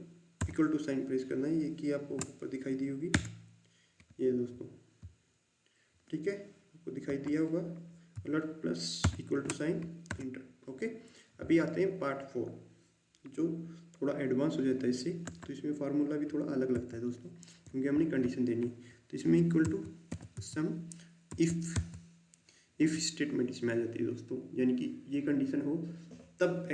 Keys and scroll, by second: 0.3 alt+=, 3.0 Return, 7.0 Delete, 9.0 alt+=, 10.0 Return, 15.2 Delete, 16.7 =, 19.6-21.7 typing.